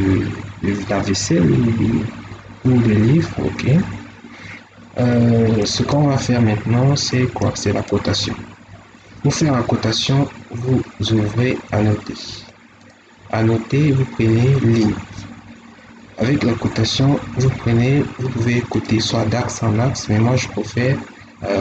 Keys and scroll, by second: 3.2 Escape.